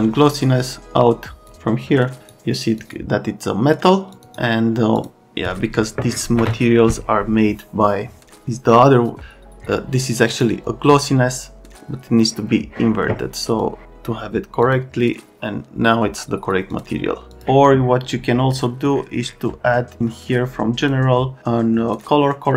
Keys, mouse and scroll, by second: 1.4 click, 2.2 click, 2.8 click, 4.1 click, 4.2 click, 4.9 click, 10.3 click, 13.6 click, 14.6 click, 16.7 click, 17.3 click, 20.8 click, 21.9 click.